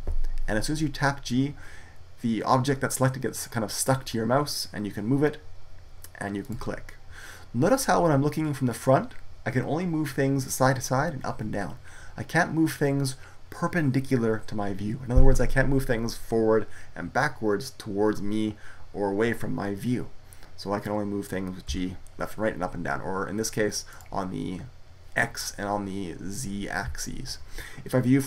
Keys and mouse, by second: 6.4-9.6 drag, 20.7-22.6 drag, 21.6 g, 23.9-26.1 drag.